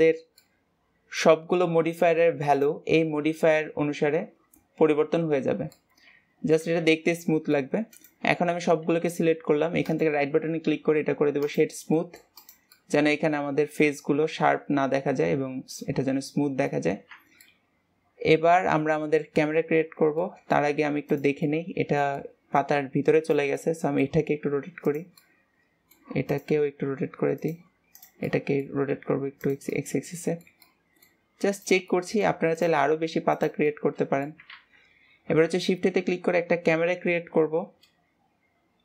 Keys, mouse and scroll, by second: 0.4-2.5 middle drag, 2.5 click, 3.0-6.8 middle drag, 6.8 ctrl+s, 7.0-7.8 middle drag, 7.8-8.8 right drag, 8.8 a, 9.8-11.9 right drag, 11.9-12.3 middle drag, 12.3 click, 12.6-15.7 middle drag, 17.1 scroll down 2, 17.4-19.4 middle drag, 19.4-19.7 scroll up 2, 20.2-21.1 middle drag, 21.1 drag, 21.4-23.2 middle drag, 23.2 drag, 23.5-24.4 middle drag, 24.4 r, 25.1-26.2 middle drag, 26.2 click, 27.9 drag, 28.2-28.9 middle drag, 28.9 r, 29.6-31.5 middle drag, 31.5 drag, 31.8-32.4 middle drag, 32.4 click, 33.6-34.5 middle drag, 34.5 ctrl+s, 35.4 shift+a.